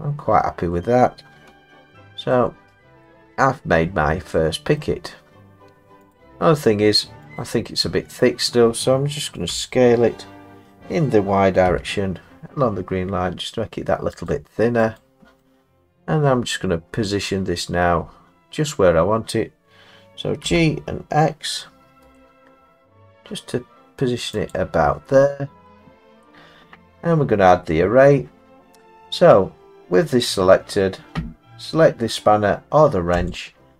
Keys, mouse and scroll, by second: 0.7 middle click, 1.5 Tab, 2.3 middle click, 2.3 middle click, 2.6 middle click, 2.7 middle click, 3.0 middle click, 4.4 middle click, 4.8 middle click, 6.1 click, 7.4 click, 8.0 middle click, 8.0 middle click, 9.5 s, 11.7 y, 15.0 click, 16.3-16.6 scroll down 1, 17.0 scroll down 1, 17.0-17.6 scroll down 4, 17.6 scroll up 3, 17.6 scroll down 3, 19.3-20.4 scroll down 4, 20.4 scroll, 20.4 g, 22.0 x, 24.5 click, 25.7 scroll, 25.8 middle click, 30.2 click, 33.3 click.